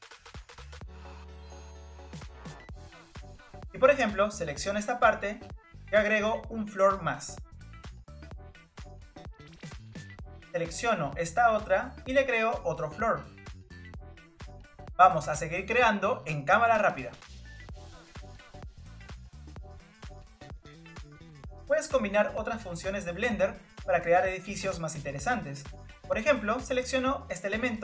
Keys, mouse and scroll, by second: 0.8 click, 2.1 click, 5.6 click, 8.3 click, 9.4-11.6 middle drag, 11.6 click, 12.6-14.7 drag, 14.7 ctrl+z, 14.8 shift+click, 14.9 middle click, 15.1 shift+click, 15.2 shift+click, 15.4 click, 15.5 middle click, 15.8 click, 15.9 shift+click, 16.1 shift+click, 16.3 click, 16.3 scroll down 1, 16.4 middle click, 16.5 shift+click, 16.6 shift+click, 16.7 shift+click, 17.0 click, 17.1 scroll down 3, 17.2 scroll up 2, 17.2 click, 17.3 shift+click, 17.4 shift+click, 17.5 shift+click, 17.7 click, 18.3 middle click, 18.6 click, 18.7 click, 18.9 click, 18.9 middle click, 19.1 click, 19.3 shift+click, 19.4 shift+click, 19.6 click, 19.8 ctrl+z, 20.0 click, 20.1 scroll down 2, 20.1 middle click, 20.2 click, 20.4 shift+click, 20.6 click, 20.7 middle click, 20.8 click, 20.9 ctrl+click, 21.1 click, 21.5 click, 21.7 click, 21.8 middle click, 22.1 scroll up 3, 22.2 middle click, 22.4 click, 23.5 click, 24.1 middle click, 25.0 click, 25.7 ctrl+z, 26.1 click, 26.9 click, 27.2 click, 27.4 click.